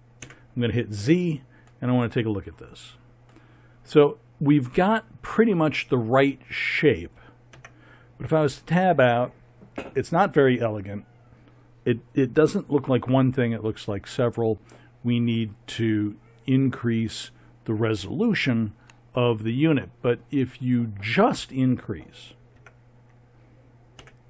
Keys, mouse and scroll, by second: 0.2 z, 5.1 middle click, 7.5 Tab, 22.6 Tab, 24.0 a.